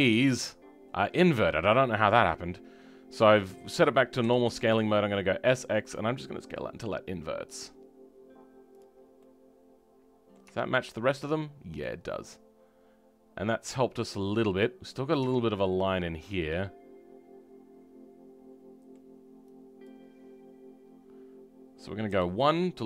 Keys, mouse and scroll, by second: 0.1 ., 0.4-4.2 shift+middle drag, 4.2 s, 8.9 scroll down 2, 9.2-10.4 middle drag, 10.4 Tab, 10.7-12.0 middle drag, 12.0 scroll up 2, 12.2-15.1 middle drag, 15.1 Tab, 15.7-22.0 middle drag, 22.0 KP_1.